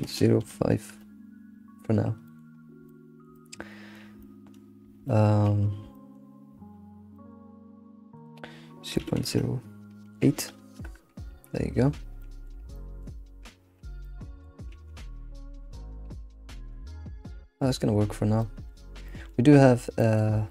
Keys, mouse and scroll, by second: 2.2 middle click, 2.5-2.8 scroll up 1, 2.8-5.7 shift+middle drag, 5.7-6.1 scroll up 3, 5.9-8.1 shift+middle drag, 8.1-11.1 drag, 12.2-13.5 middle drag, 13.5 alt+shift+z, 14.0-14.7 middle drag, 14.7 ctrl+s, 14.9-15.4 scroll down 2, 15.4 Tab, 15.8 middle click, 16.1 alt+q, 16.5-17.3 middle drag, 17.3 scroll down 1, 17.6-18.0 middle drag, 18.0-18.4 scroll up 3, 18.4-19.5 middle drag, 19.5-20.0 scroll up 1, 20.0-20.5 shift+middle drag.